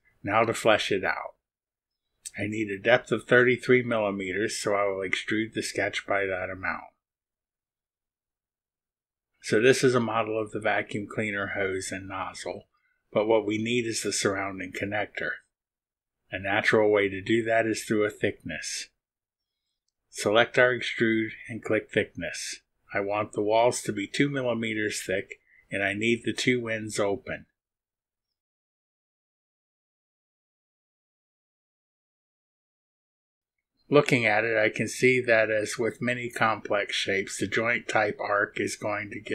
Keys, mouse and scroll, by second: 1.5 click, 3.7 click, 7.8 Return, 12.2-13.4 drag, 13.4 middle click, 13.6 click, 14.4 click, 15.3 click, 17.2-19.4 drag, 20.6 click, 22.6 click, 24.4 click, 24.6 click, 25.7 click, 28.5 click, 29.1 click, 29.7 middle click, 29.8 click, 31.2 ctrl+click, 32.3 click, 34.8 middle click, 35.0-36.5 drag, 36.5 middle click.